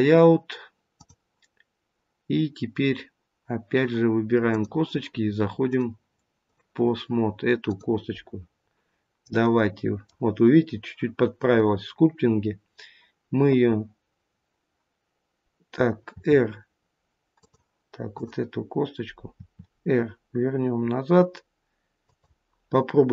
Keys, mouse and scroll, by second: 0.9 click, 4.4 click, 5.6 click, 8.4 click, 8.4-9.4 scroll down 3, 9.4 middle click, 16.1 r, 18.0 click, 19.3 r.